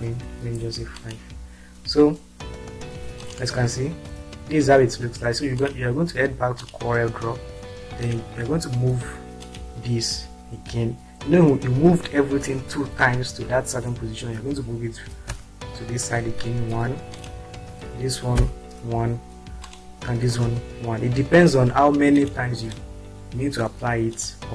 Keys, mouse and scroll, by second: 0.5 5, 3.3 click, 5.6 click, 15.3 click, 18.6 Up, 19.7 click, 20.5 Right, 23.3-24.2 drag.